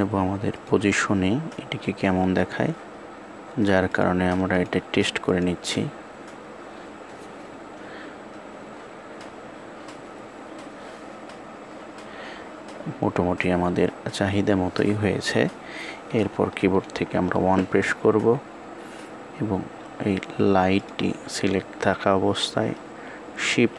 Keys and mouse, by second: 4.3 click.